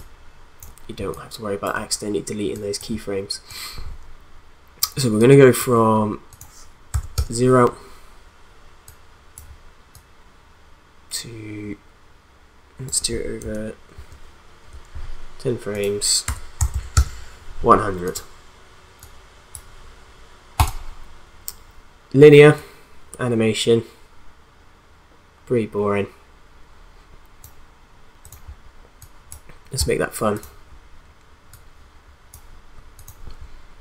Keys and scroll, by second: 6.9 0, 7.1 Return, 13.9 ctrl+shift+Right, 16.1-17.1 typing.